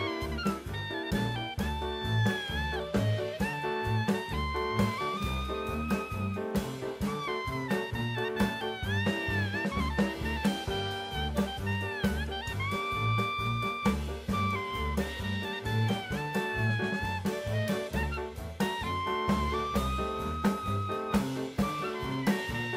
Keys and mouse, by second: 2.4 middle click, 3.3 middle click, 4.0 click, 5.5 middle click, 6.4-7.8 drag, 10.8 Tab, 15.1 middle click, 16.7 click, 18.8-20.4 right drag, 21.0 g.